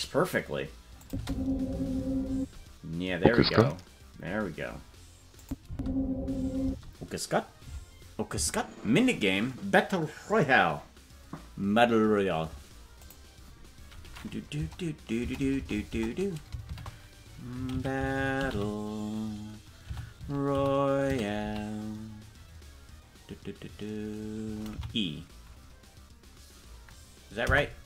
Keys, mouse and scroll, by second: 1.0 click, 1.1 space, 2.3 space, 4.2-5.4 scroll up 2, 5.4 click, 5.6 space, 6.6 space.